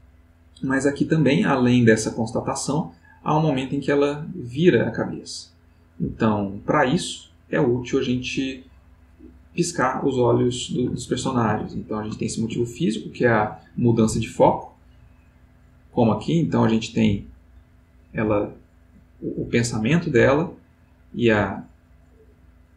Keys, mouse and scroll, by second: 11.7 ctrl+middle click, 12.2 ctrl+middle click, 13.0-22.7 drag.